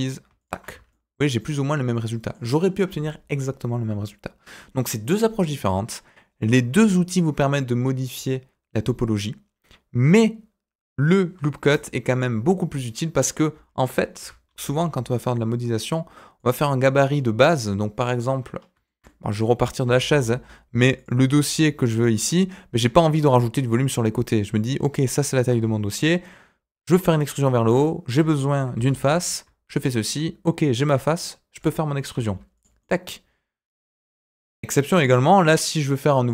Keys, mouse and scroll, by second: 0.7 Tab, 0.9 middle click, 1.9 middle click, 11.7 Delete, 12.1 click, 12.8 middle click, 14.1 Delete, 14.4 shift+a, 17.1 middle click, 18.5 scroll up 1, 18.8 shift+middle click, 19.3 middle click, 19.8 s, 21.5 middle click, 22.0 shift+middle click, 22.1-24.0 scroll up 2, 25.4 Tab, 28.7 ctrl+r, 30.7 click, 31.5 click, 32.1 e, 32.8 middle click.